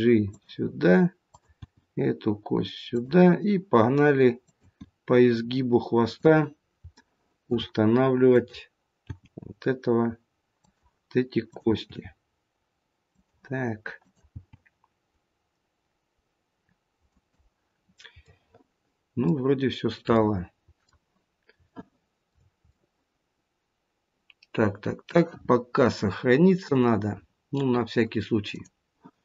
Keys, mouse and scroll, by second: 1.2 click, 1.9 g, 4.3 click, 5.2 g, 6.9 shift+middle click, 8.2 click, 9.0 g, 12.1 click, 12.2 g, 13.9 click, 15.2 g, 17.7-18.4 scroll down 3, 18.2 middle click, 19.6-20.3 scroll up 2, 20.1 middle click, 21.6 shift+middle click, 22.6 middle click, 26.6 click.